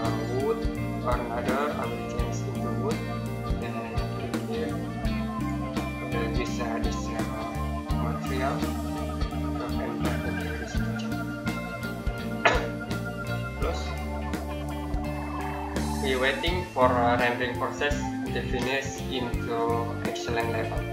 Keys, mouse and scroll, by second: 1.2 click, 13.4 click, 15.0 middle click.